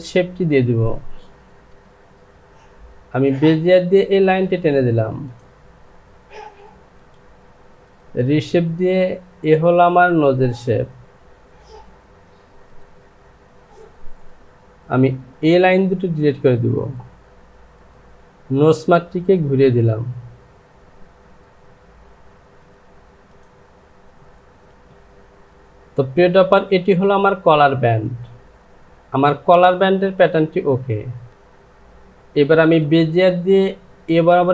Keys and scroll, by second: 13.3 Return, 24.8 Home, 24.9 Return, 31.3 Delete.